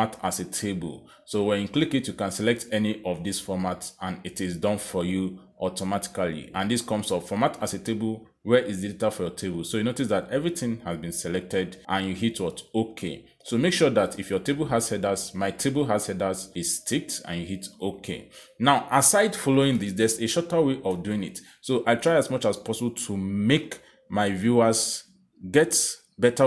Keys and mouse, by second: 1.1 click, 4.4 click, 18.0 click, 19.2 click, 21.3 ctrl+z, 24.7 click, 25.6 click.